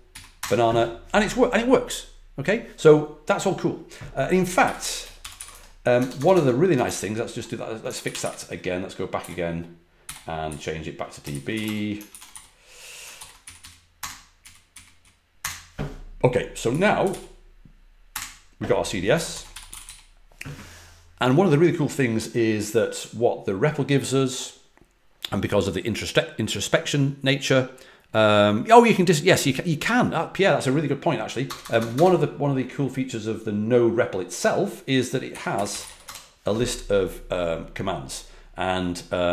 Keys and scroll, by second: 0.1 Down, 0.3 Return, 4.3-7.0 typing, 8.0 ctrl+a, 8.2-10.4 typing, 11.5 w, 11.6 Return, 12.0 ctrl+a, 12.3 i, 13.1 ctrl+l, 13.4 Up, 13.5 Up, 13.9 Return, 14.4 Up, 14.7 Up, 15.3 Return, 16.4-17.5 typing, 18.1 Return, 19.2-20.3 typing, 31.4-32.4 typing, 35.0-36.5 typing.